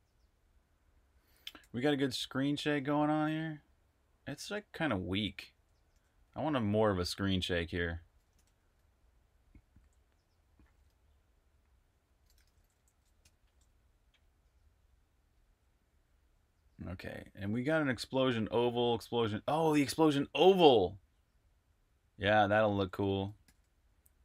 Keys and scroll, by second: 1.5-2.0 typing, 4.0 s, 5.8 super+q, 8.2 super+_, 8.2 super+`, 9.6 j, 11.9-13.1 typing, 15.6-24.1 typing.